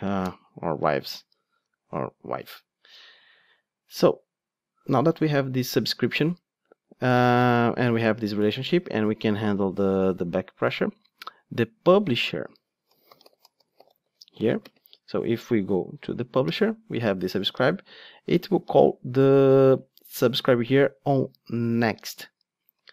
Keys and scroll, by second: 21.7 ctrl+Tab.